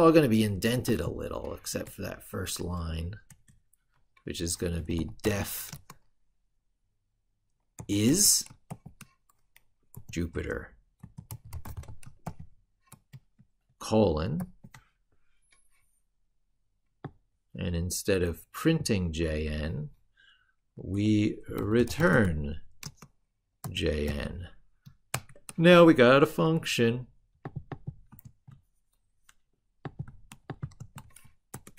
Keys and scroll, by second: 28.0 ctrl+c, 30.6 ctrl+v.